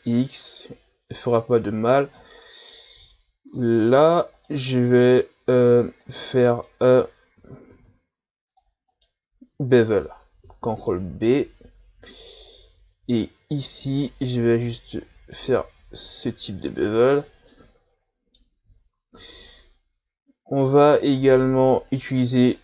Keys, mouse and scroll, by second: 2.2-4.3 middle drag, 4.3 right click, 4.7-6.0 middle drag, 6.0 shift+right click, 6.6-7.7 middle drag, 7.7 ctrl+Tab, 8.9 right click, 10.4 ctrl+b, 17.5-18.8 middle drag, 18.8-19.2 scroll down 1, 19.2 Tab, 19.5-21.9 middle drag, 21.9-22.6 drag.